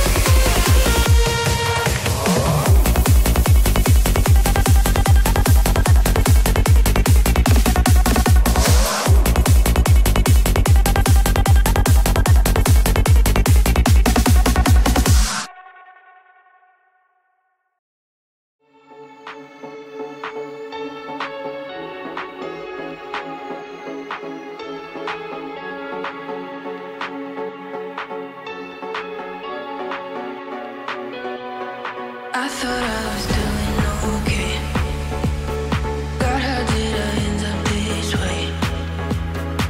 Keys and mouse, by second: 0.1 shift+middle click, 2.8 shift+click, 4.1-7.1 drag, 7.2-14.4 drag, 17.2 click, 19.1 click, 19.6 click, 21.9 middle click, 22.9 Tab, 23.7-24.4 shift+middle drag.